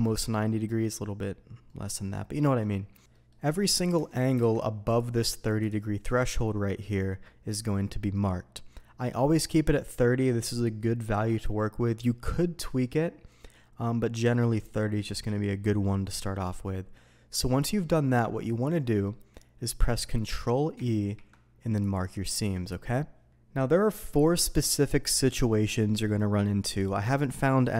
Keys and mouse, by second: 0.5 shift+middle click, 1.6 shift+click, 2.7 middle click, 3.1 Tab, 3.1 middle click, 3.5 middle click, 3.9 Tab, 4.5 alt+a, 5.0-5.7 drag, 18.6-19.0 middle drag, 20.7 ctrl+e.